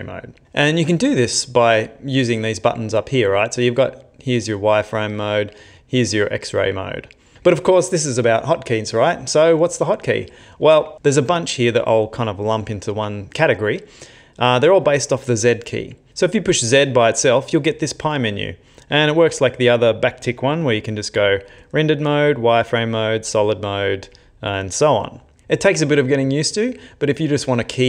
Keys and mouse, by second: 2.4 click, 5.2 click, 5.8 click, 6.8 click.